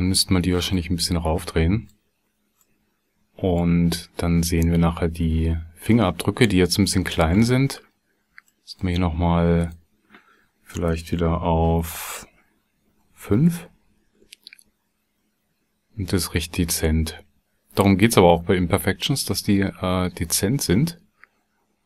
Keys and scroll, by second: 10.7 BackSpace, 12.9 KP_5, 13.3 KP_Enter.